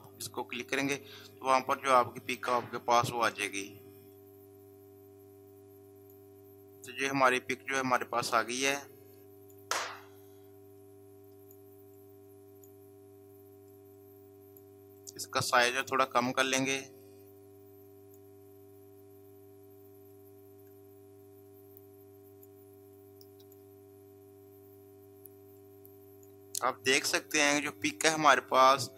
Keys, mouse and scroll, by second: 0.8-8.5 drag, 8.6-28.7 drag.